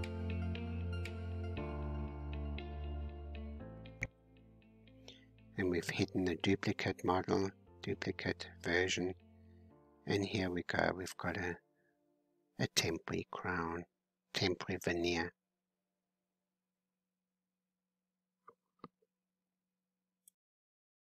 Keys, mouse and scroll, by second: 1.1-3.5 drag, 3.5 h, 4.7-5.9 middle drag, 5.9-6.2 scroll up 5, 6.5-9.1 middle drag, 9.1-10.3 scroll down 4, 11.8 alt+h, 12.5 middle click, 13.3 scroll down 2, 14.1-17.1 middle drag, 17.2 shift+middle click, 18.0-19.9 drag.